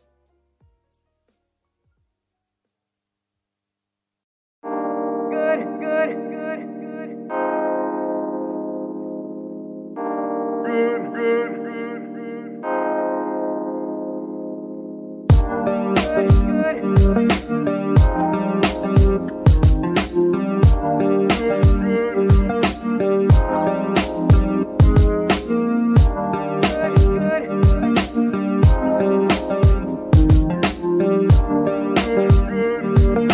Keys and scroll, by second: 7.4 g, 9.0 shift+z, 9.5 shift+g, 12.2 shift+g, 15.6 g, 18.5 g, 23.2 z, 26.1 KP_3, 31.4 g, 32.1 Tab, 32.7 shift+Tab, 32.8 shift+s.